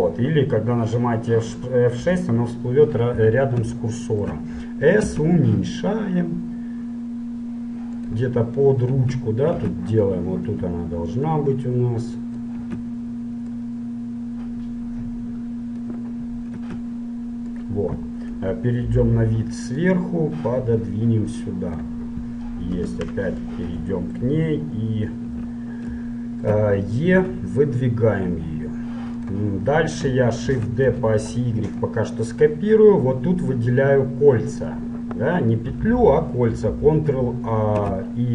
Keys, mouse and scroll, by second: 2.1 t, 3.9 middle click, 5.2 s, 9.1 z, 9.6 z, 11.4-13.3 drag, 12.8 z, 13.7-15.6 drag, 16.6 s, 18.4 KP_7, 20.1-21.8 drag, 22.8 KP_Decimal, 23.6 middle click, 25.5 z, 27.4 e, 30.5 shift+d, 32.4-34.1 middle drag, 37.9 a.